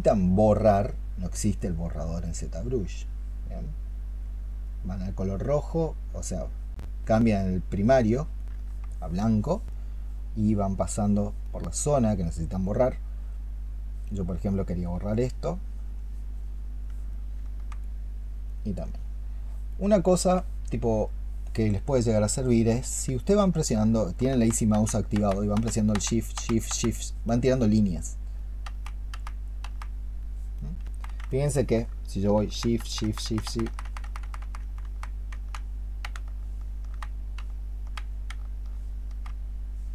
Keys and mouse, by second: 31.2 alt+click.